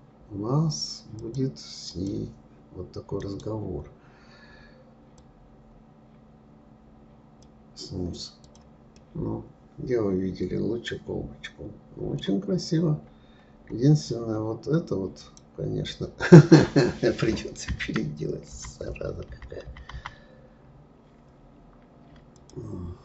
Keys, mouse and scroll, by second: 0.5-1.0 right drag, 1.2-3.2 drag, 3.2-6.2 right drag, 8.5 click, 9.0-12.0 middle drag, 12.6-15.2 scroll up 14, 15.2 click, 18.7 ctrl+z, 18.9 ctrl+z, 19.3 ctrl+z, 19.7 ctrl+z, 19.9 ctrl+z, 22.4 click.